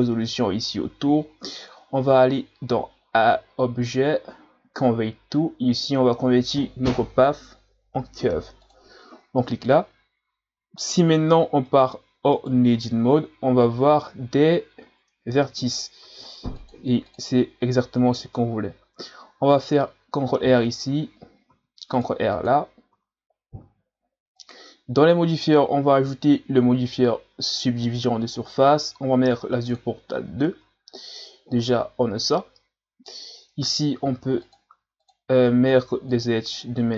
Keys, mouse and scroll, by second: 3.2-6.2 drag, 11.7 right click, 12.3 right click, 12.8 Tab, 16.0 ctrl+r, 19.5-20.1 scroll up 1, 21.5 ctrl+r, 23.0 Tab, 24.3 click, 26.1-29.1 drag, 29.7 click, 30.5 Tab, 34.0 ctrl+r, 35.7 ctrl+r.